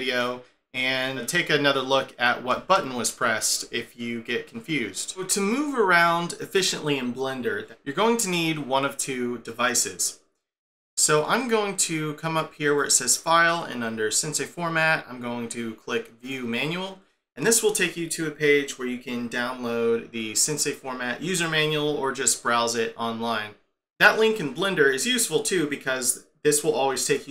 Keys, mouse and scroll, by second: 0.4 scroll down 2, 0.7 scroll up 2, 2.6 space, 12.8 click.